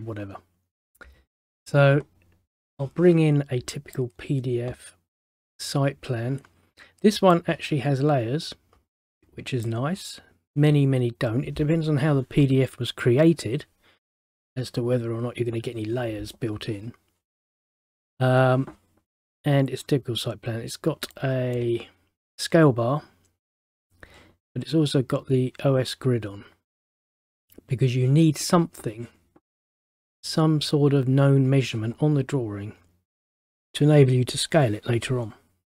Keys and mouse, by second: 2.7 click, 7.4 click, 21.2 middle click.